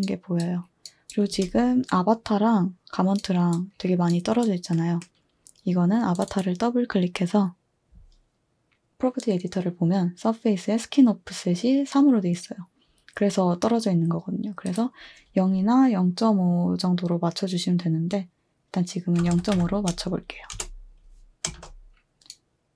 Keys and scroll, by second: 1.3 typing, 2.6 typing, 18.9-21.5 typing.